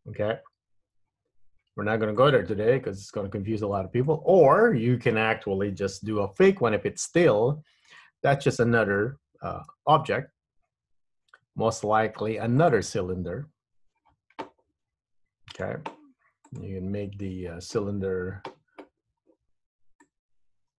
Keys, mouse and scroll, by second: 2.3 click, 3.6 scroll up 1, 3.9 scroll down 1, 4.2 middle click, 7.4 middle click, 9.8 shift+a, 15.6 click, 16.6 click, 19.3-20.1 scroll down 1, 20.1 click.